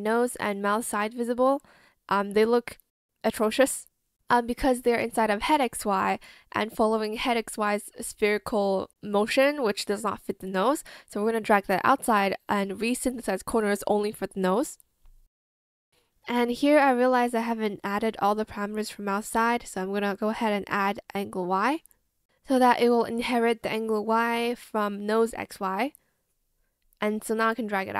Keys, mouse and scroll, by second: 22.1 alt+click, 22.3 ctrl+z, 22.5 shift+click.